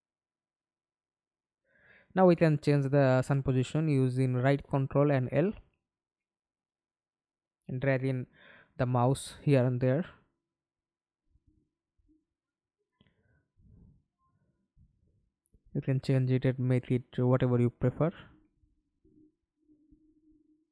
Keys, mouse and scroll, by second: 0.1 ctrl+l, 1.2-4.0 ctrl+l.